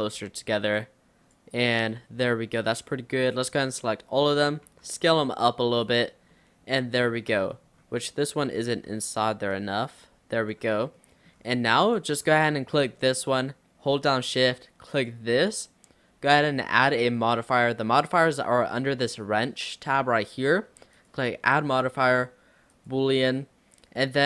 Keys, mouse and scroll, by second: 0.8 click, 1.7 click, 2.6 click, 3.5 a, 3.8-4.7 scroll down 2, 3.9 middle click, 4.7 s, 6.1 Tab, 6.4-7.4 middle drag, 7.4 Tab, 7.6-8.1 scroll up 3, 8.2 click, 8.8 l, 9.6 click, 10.7 Tab, 11.0-11.4 middle drag, 11.4-11.9 scroll down 3, 11.9 click, 12.3-12.9 middle drag, 12.9 click, 14.9 shift+click, 21.0-24.0 drag.